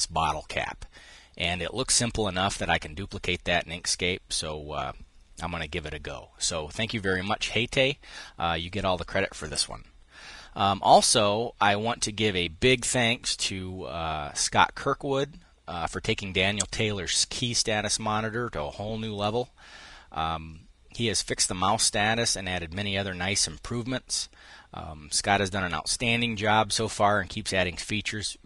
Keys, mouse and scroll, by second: 6.6 click, 12.4 click.